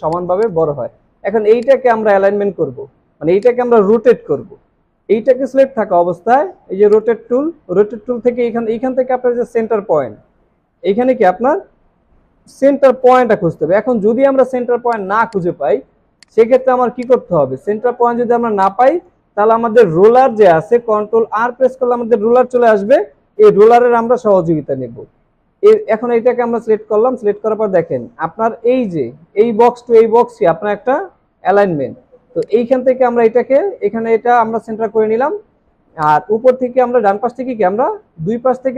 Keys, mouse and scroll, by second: 0.0 space, 0.7 alt+scroll down 1, 3.3 space, 9.4-10.3 alt+scroll up 1, 13.5-13.9 alt+scroll down 1, 15.7 alt+scroll down 1, 16.1 space, 16.7 alt+scroll down 1, 17.6 alt+scroll up 2, 19.1 space, 21.0 ctrl+r.